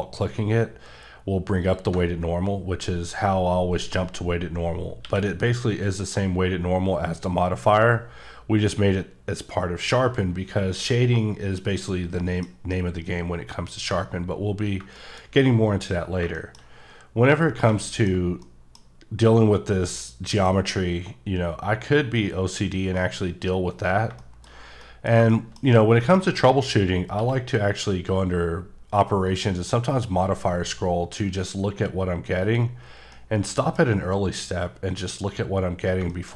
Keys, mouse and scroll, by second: 1.6 click, 5.0 q, 11.1 scroll down 3, 11.9 middle click, 12.7 middle click, 14.0-14.5 scroll up 6, 14.9 shift+middle click, 15.2-16.0 scroll up 3, 16.0 scroll up 3, 16.2 shift+scroll down 3, 16.4 middle click, 17.5 scroll down 3, 17.8 middle click, 18.4 middle click, 19.1-20.2 scroll up 3, 20.2-21.3 scroll up 1, 24.0 scroll, 24.2 shift+middle click, 24.5 scroll down 2, 24.8 middle click, 25.3 double middle click, 25.7 scroll up 2, 26.0 middle click, 26.6 scroll up 1, 27.1 q, 29.2 click, 30.2-30.9 scroll up 1, 31.0-31.5 scroll up 1, 32.2-32.9 scroll down 4, 32.4 click, 33.1 middle click, 33.8 scroll up 3, 35.7 scroll, 36.1 shift+middle click.